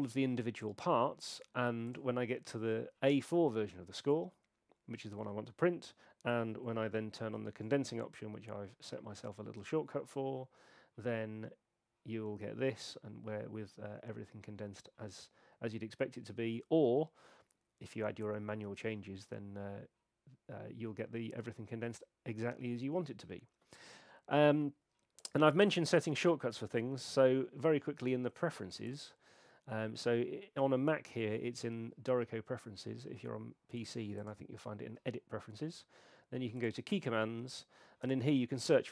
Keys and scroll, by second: 7.3 shift+super+c.